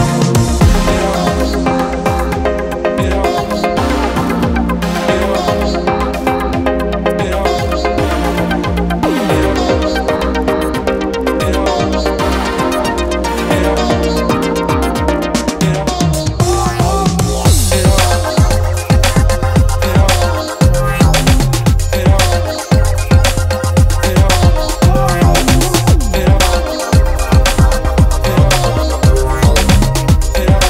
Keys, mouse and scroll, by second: 8.8 click, 11.4 KP_7, 12.9 KP_0, 14.3 KP_0, 15.4 KP_7, 17.0 shift+a, 20.8 KP_3, 21.5 r, 24.3 KP_0.